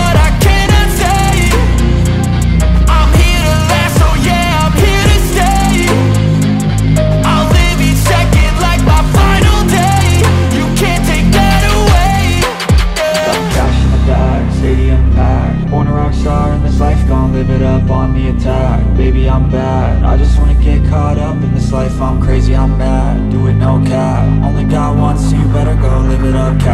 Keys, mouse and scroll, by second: 0.2 alt+middle click, 0.9-1.3 scroll up 1, 1.4 shift+click, 2.1-3.2 typing, 3.5 scroll down 1, 4.5 alt+middle click, 5.0 scroll down 1, 5.2 alt+middle click, 6.1 scroll down 1, 6.3 alt+middle click, 6.5 scroll up 1, 7.4 shift+click, 8.0-8.5 scroll up 1, 8.6 shift+click, 9.6-10.5 typing, 11.7 alt+middle click, 11.8 alt+click, 12.7 alt+click, 13.4 scroll up 1, 13.7 alt+click, 14.5-14.8 scroll down 1, 14.8 alt+click, 15.7-16.3 scroll down 1, 17.4 alt+middle click, 17.7 scroll up 1, 18.1-19.3 scroll down 1, 22.2 double click, 23.2-25.0 typing.